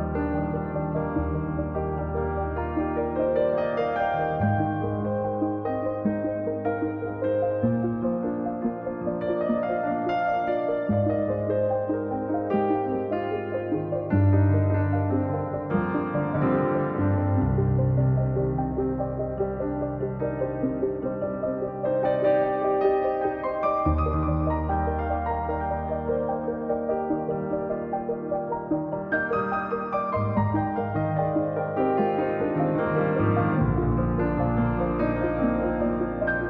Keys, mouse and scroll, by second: 1.4 middle click, 1.9-3.0 drag, 4.1-4.5 scroll up 8, 4.5-5.7 drag, 7.0 scroll down 2, 7.2 middle click, 7.6 click, 8.2 middle click, 8.9 click, 9.1-9.6 scroll down 1, 9.6 middle click, 10.0-10.3 scroll up 8, 10.3 middle click, 10.7 click, 11.6 scroll down 1, 11.8 middle click, 12.6-13.8 drag, 15.7 scroll down 11, 16.0 middle click, 16.7 click, 17.0-17.6 scroll up 4, 17.6-18.3 scroll up 7, 17.6 click, 18.3-19.4 drag, 19.6 scroll up 1, 19.7 middle click, 20.0-21.2 drag, 21.5-21.9 scroll up 1, 21.9 click, 22.4-23.5 middle drag, 23.5-24.6 drag, 25.7 middle click, 26.1-26.4 scroll down 2, 26.4 middle click, 26.7 scroll down 1, 26.9-28.1 drag, 30.9 middle click, 31.2-32.4 drag, 32.4 middle click, 32.7-33.8 drag, 33.8-34.3 scroll down 10, 34.3 KP_1, 34.7-35.0 scroll up 4, 35.0-36.2 middle drag, 36.2 KP_1.